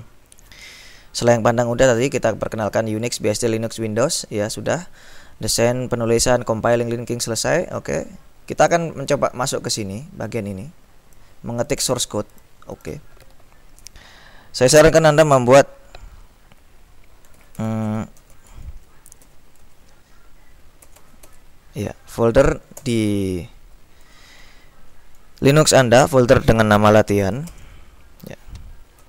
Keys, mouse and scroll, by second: 0.6-2.0 drag, 8.7 click, 9.7-12.4 drag, 12.9 click, 17.3-19.3 typing, 19.8 Tab, 20.9 l, 22.9 Return, 27.1-29.0 typing.